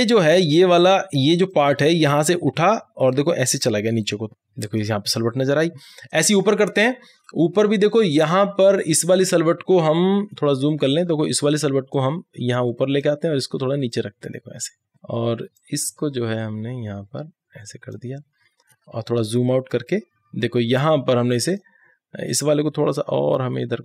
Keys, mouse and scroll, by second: 0.3-6.5 drag, 6.5 scroll up 1, 7.0 scroll up 1, 8.2 click, 9.1 scroll up 1, 10.3-10.7 alt+scroll up 1, 11.3-16.6 drag, 16.6-17.4 scroll down 2, 17.4 scroll down 1, 17.5-18.8 drag, 18.8 alt+scroll down 1, 19.6-23.8 drag.